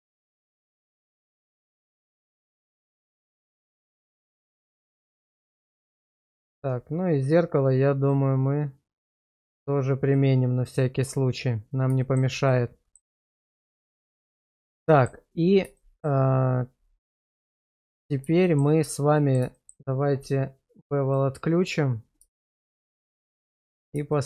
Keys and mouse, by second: 1.0 middle click, 1.7 shift+middle click, 2.1 middle click, 2.8 shift+middle click, 3.7 middle click, 4.6 shift+middle drag, 5.2 middle click, 8.1 click, 9.0 click, 10.0 click, 12.0 shift+middle drag, 12.5-12.9 middle drag, 13.4 shift+middle drag, 14.3-14.6 middle drag, 14.9 shift+middle drag, 15.7 shift+middle drag, 17.2-18.0 middle drag, 18.4 shift+middle click, 19.1 middle drag, 19.5 shift+middle drag, 21.1 click, 22.3 shift+middle drag, 22.9 shift+z, 23.3 middle click, 24.1 middle drag.